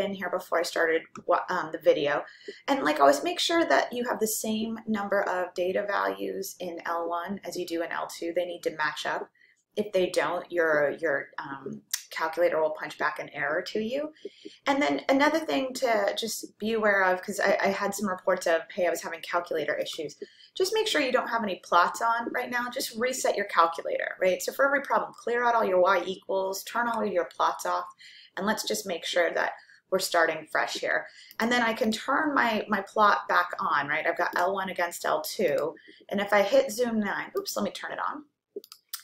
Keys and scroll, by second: 35.6 Return, 37.4 Return.